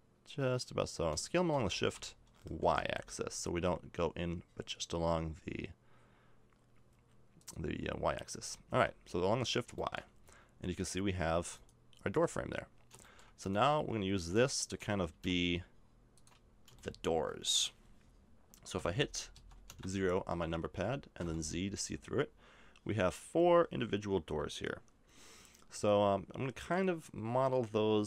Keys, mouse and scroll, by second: 7.9-9.4 middle drag, 8.3 a, 8.7 Tab, 11.5 right click, 12.1 Tab, 12.5 middle click, 15.1 s, 16.3 middle click, 16.9 middle click, 17.4-18.6 middle drag, 18.8 z, 19.3 z, 19.7 KP_0, 21.2 z.